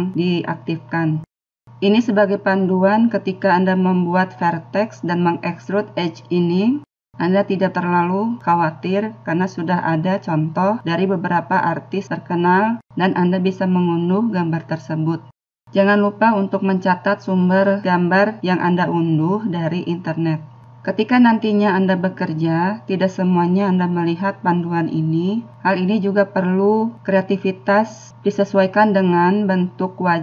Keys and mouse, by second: 0.9 middle click, 4.0-11.2 middle drag.